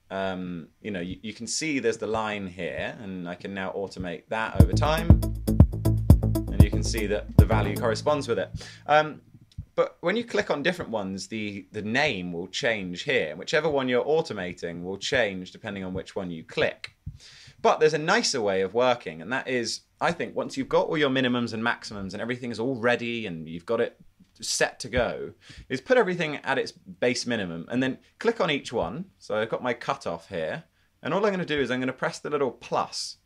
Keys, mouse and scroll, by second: 4.7 space, 7.0-7.9 typing, 8.2 super+z, 17.4 super+z.